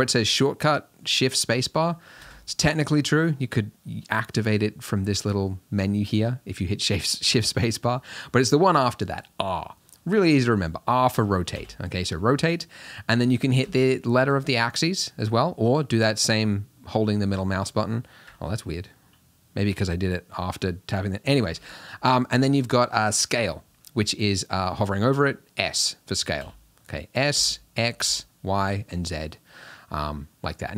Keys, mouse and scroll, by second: 11.6 r, 19.7 r, 26.4 s.